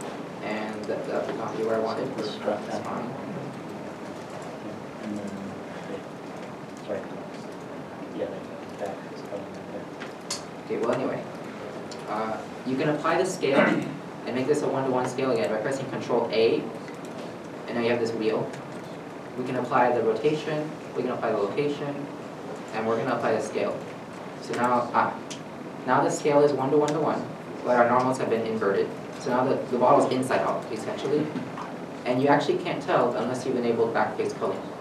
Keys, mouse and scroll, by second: 0.0 n, 0.1 middle click, 0.2 scroll up 1, 2.8 scroll, 2.9 Tab, 3.4 Tab, 3.5 scroll, 4.4 scroll up 1, 4.5 n, 6.0 s, 6.2 z, 7.6 right click, 7.8 scroll up 1, 8.5 Tab, 9.2 scroll, 9.2 scroll down 1, 10.2 Tab, 10.6 a, 12.0 Tab, 14.8 Tab, 14.8 middle click, 15.5 scroll down 1, 16.8 ctrl+a, 24.7 ctrl+a, 24.7 middle click, 28.0-28.3 scroll up 1, 29.6 middle click.